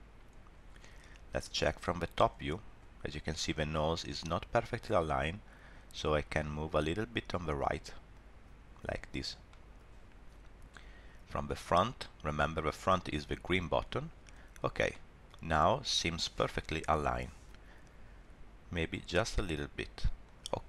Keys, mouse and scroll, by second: 1.7 click, 6.2 g, 9.5 shift+middle click, 13.5 click, 14.5 scroll up 2, 14.9 shift+middle click, 15.3-15.7 scroll down 2, 19.1 r.